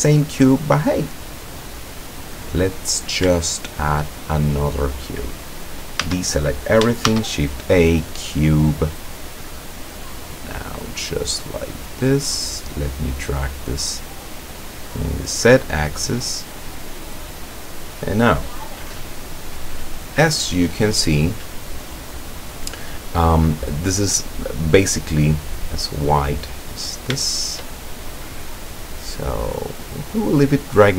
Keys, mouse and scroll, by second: 2.4-3.0 scroll down 2, 3.4 shift+click, 6.0 a, 7.1 shift+a, 8.0 click, 9.3-12.1 drag, 12.7-18.5 drag, 23.8 click, 25.7-26.7 drag, 27.2 shift+click, 28.2-30.3 drag.